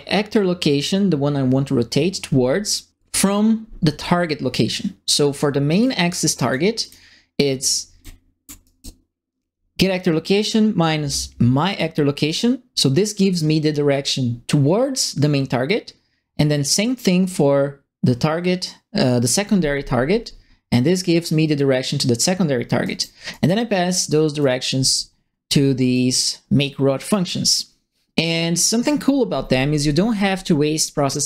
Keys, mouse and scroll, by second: 5.8 click, 6.8 click, 7.6 middle click, 8.1 ctrl+middle click, 8.6 right click, 11.6 click, 12.2 click, 22.4 middle click, 22.8 right click, 23.3 right click, 23.7 middle click, 24.4 right click, 25.1 ctrl+middle click, 25.9 right click, 26.6 click, 27.4 click.